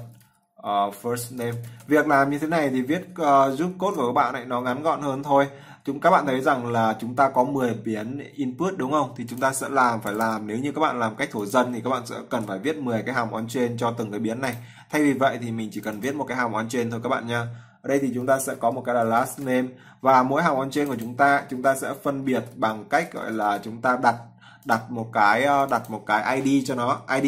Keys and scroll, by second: 3.6 ctrl+s, 12.1 ctrl+v.